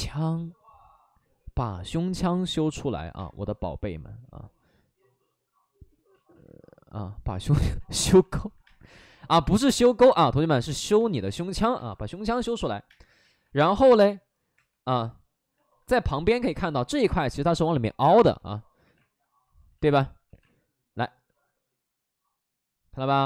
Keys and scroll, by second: 3.1 space, 6.0 ctrl+z, 6.2 ctrl+z, 7.9 alt+s, 8.7 space, 10.9 space, 11.8 space, 12.8 space, 14.4 3, 15.9 2, 18.3 2, 18.7 1, 19.8 ctrl+z, 20.2 2, 23.1 1.